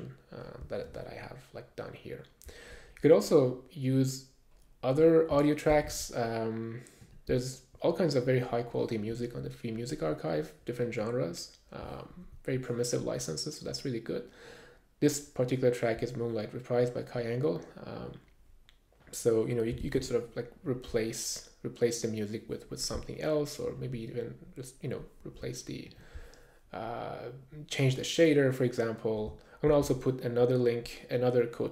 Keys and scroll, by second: 6.9 super+`, 20.7 super+`, 29.7 super+`.